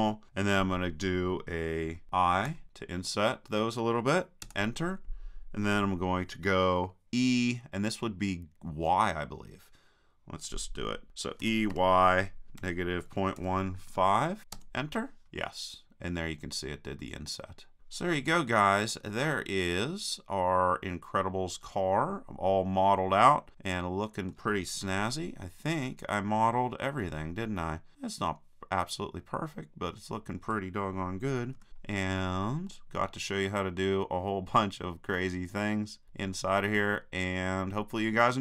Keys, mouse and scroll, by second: 2.5 i, 11.4 e, 15.3 middle click, 18.2 middle click, 19.8-21.6 middle drag, 21.7 middle click, 21.9 middle click, 23.7 middle click, 24.9 KP_3, 27.9 middle click, 28.7-31.6 middle drag, 31.6 KP_3.